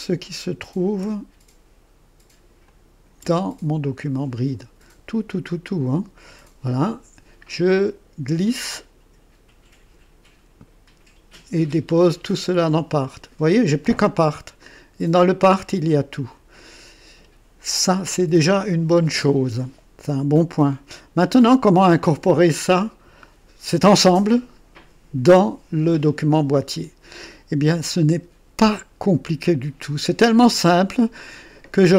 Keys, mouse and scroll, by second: 2.6 shift+click, 7.7-11.3 drag, 12.9 click, 14.6 click, 16.1 click.